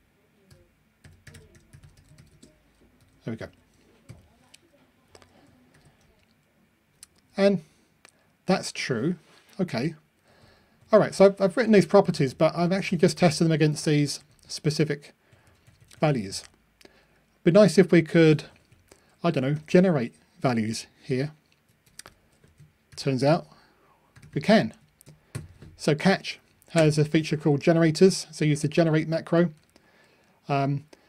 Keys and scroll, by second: 2.9 Delete, 4.0 super+F9, 5.7 ctrl+r.